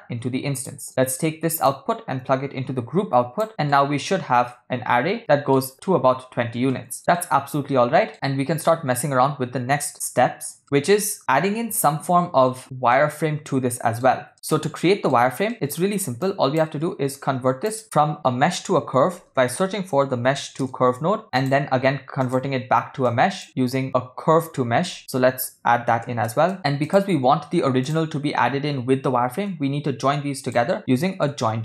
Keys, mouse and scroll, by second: 0.9 middle click, 1.7-3.5 drag, 3.5 middle click, 4.5-5.6 shift+middle drag, 6.7 ctrl+middle click, 7.2 shift+middle click, 8.2-8.7 shift+middle drag, 10.6 middle click, 12.9-14.1 middle drag, 14.3 ctrl+middle click, 14.8 shift+middle drag, 15.5 middle click, 16.2 click, 17.2 shift+a, 23.1 click, 24.7 shift+a, 26.6 BackSpace, 29.6 shift+a.